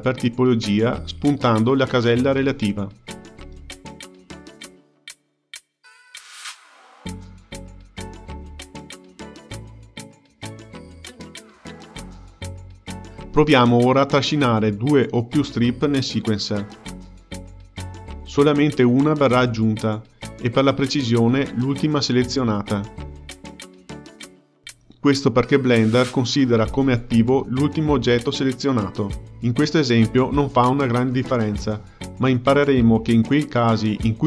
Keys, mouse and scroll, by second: 12.5 click, 15.1 click, 15.9 ctrl+click, 16.7 ctrl+click, 17.4-18.6 drag, 21.6 ctrl+z, 22.4 click, 23.2 click, 24.0 ctrl+click, 24.7 ctrl+click, 25.4-26.5 drag.